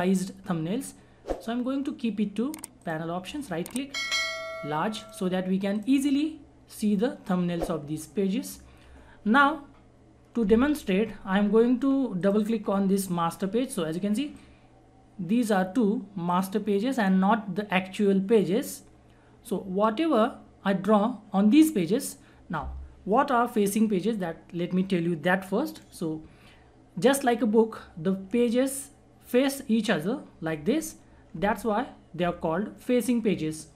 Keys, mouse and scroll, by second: 1.3 right click, 2.8 click, 12.2-18.8 drag, 18.8 scroll up 1, 22.4 scroll down 1.